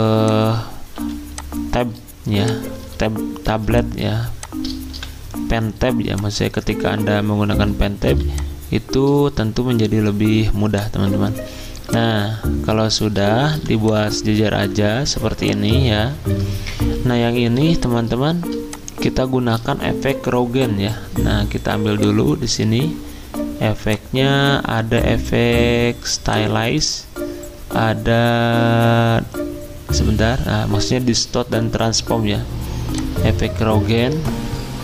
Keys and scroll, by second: 0.9 x, 3.5-4.9 typing, 8.0 r, 11.4 z, 13.5 r, 16.1 ctrl+z, 17.6 z, 18.5 z, 22.3 z.